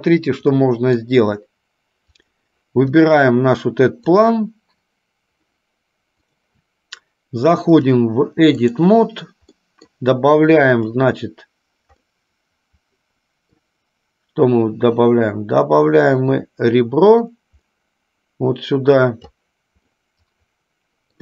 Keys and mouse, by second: 0.8 middle click, 2.3 click, 4.3 click, 6.5 click, 8.0-9.0 drag, 9.8 middle click, 11.0 click, 12.2-13.8 middle drag, 17.4-19.5 drag, 20.2 middle click, 20.5 middle click.